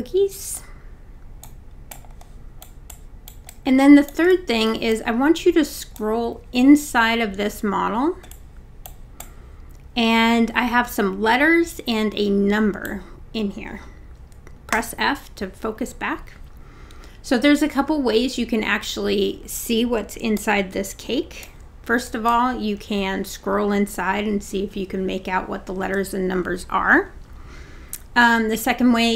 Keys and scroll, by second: 14.8 f.